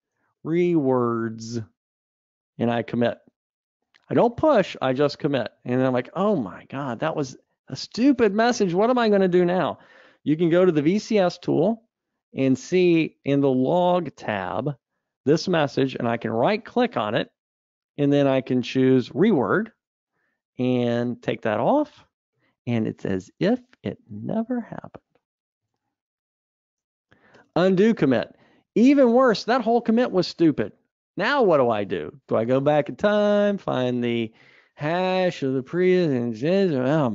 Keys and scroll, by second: 11.8 super+9, 20.1 F2, 25.8 super+Up.